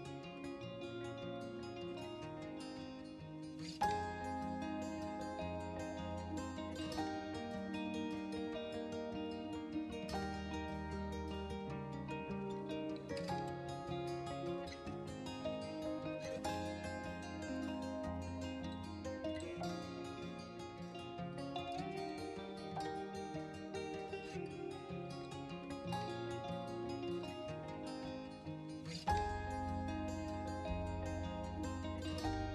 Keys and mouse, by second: 1.7 click, 2.9 Tab, 4.2 r, 4.5 x, 8.1 click, 8.7-11.6 middle drag, 12.3 KP_3, 13.6 click, 15.1 shift+s, 16.6 Tab, 18.4-19.8 drag, 20.8 g, 21.5 shift+x, 23.6 click, 24.4 Tab, 25.1 r, 25.4 x, 29.0 click, 29.5-30.4 middle drag, 31.1-32.5 middle drag.